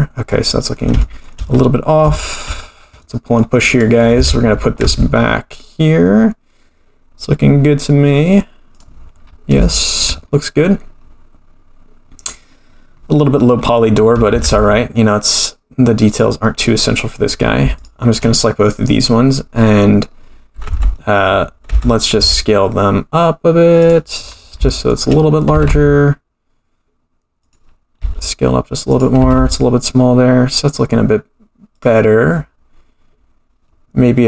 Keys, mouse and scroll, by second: 0.3-0.9 middle drag, 1.0-1.3 shift+middle drag, 1.5-2.0 scroll up 4, 2.1 shift+middle drag, 2.4-2.9 scroll down 3, 3.0-3.4 middle drag, 3.7 click, 4.1 g, 9.2-9.6 scroll up 5, 9.6-10.0 shift+middle drag, 10.3-11.0 scroll up 2, 11.0-12.4 scroll down 1, 12.4 scroll down 1, 14.3 g, 16.7 scroll down 2, 17.2 scroll up 3, 17.7 shift+click, 18.4-19.5 scroll down 2, 20.6 Tab, 21.6 Tab, 22.1 s, 24.2-24.7 scroll down 5, 24.7 shift+middle drag, 25.5 g, 28.0 s, 29.2 g.